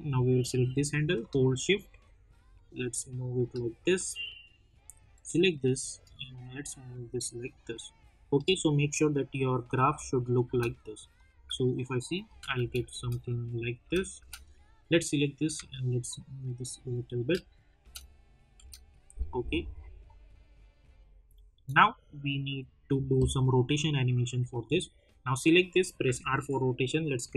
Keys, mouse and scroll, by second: 9.8 space, 11.1 click, 11.3 space, 13.2 click, 13.8 space, 14.5-16.4 drag, 19.1 space, 20.2-22.5 drag, 26.0 r, 27.2 click.